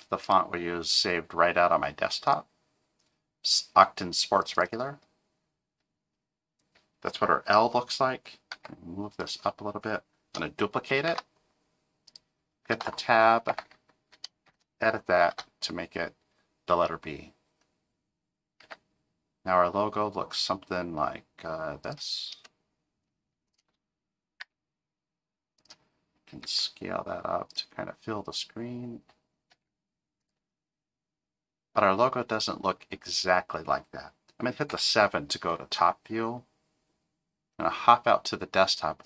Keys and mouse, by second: 8.5 g, 11.1 shift+d, 12.7 Tab, 13.5 BackSpace, 14.5 shift+b, 15.3 Tab, 18.6 g, 23.5 shift+click, 24.4 g, 26.4 s, 29.5 g, 34.7 KP_7.